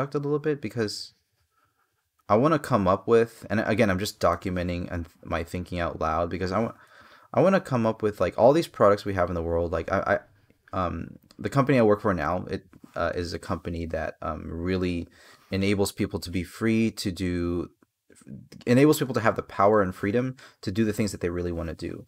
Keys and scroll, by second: 6.6 space, 12.9 space, 21.7 space.